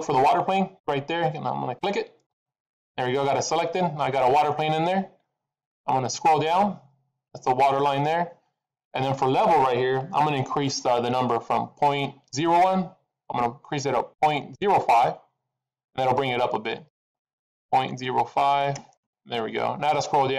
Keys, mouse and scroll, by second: 2.4 click, 3.9 middle click, 6.2-7.3 scroll down 8, 16.8 click.